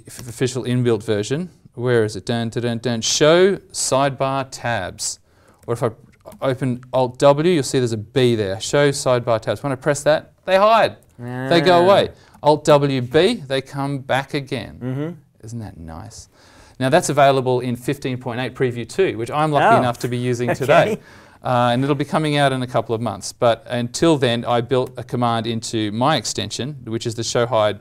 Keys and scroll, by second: 6.3 alt+w, 12.3 alt+w, 24.8 alt+w.